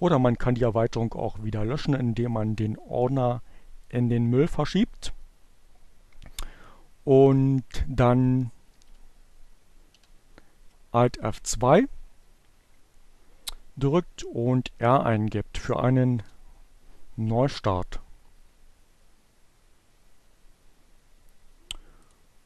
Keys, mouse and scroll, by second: 0.6 right click, 3.3 click, 8.0 alt+F2, 9.1 r, 15.7 Return.